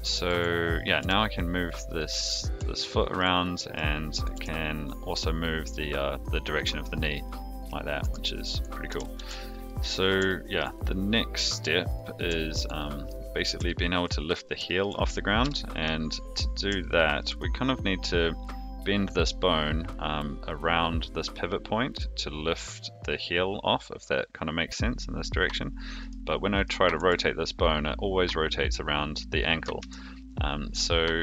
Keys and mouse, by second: 0.8 click, 1.0 g, 1.9 middle drag, 2.7-3.2 shift+middle drag, 3.4-3.7 middle drag, 4.2 click, 4.3 g, 6.9 middle drag, 8.0 a, 8.8 alt+r, 9.1 alt+g, 9.7 middle drag, 10.3-10.6 shift+middle drag, 12.3 shift+middle drag, 12.7-13.1 middle drag, 13.6-14.0 shift+middle drag, 14.6 shift+middle click, 15.4 KP_3, 16.8-17.2 shift+middle drag, 26.9 r, 29.8 ctrl+z.